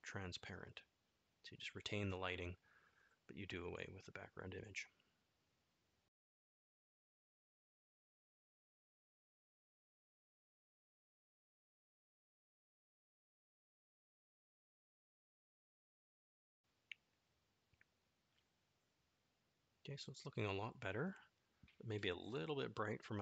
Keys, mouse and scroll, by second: 7.0 click, 11.1 click, 16.2-18.2 middle drag, 19.5 middle click.